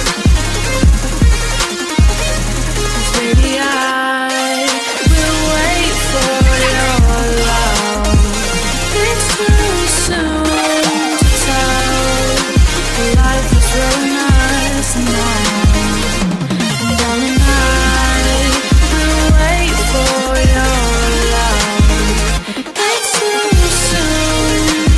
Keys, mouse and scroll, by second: 1.8-3.7 typing, 3.7 Return, 4.8 click, 7.1 click, 8.2 F10, 8.7 right click, 9.4-10.6 typing, 11.3 Return, 20.0 click, 23.3-24.8 typing.